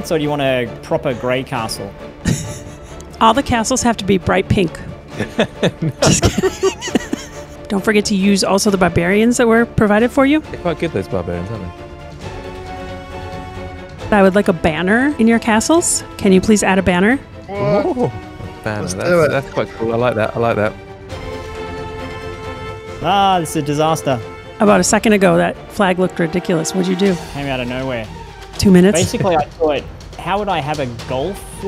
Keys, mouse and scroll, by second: 1.9 shift+right click, 2.5 shift+a, 3.0 shift+middle click, 3.6 click.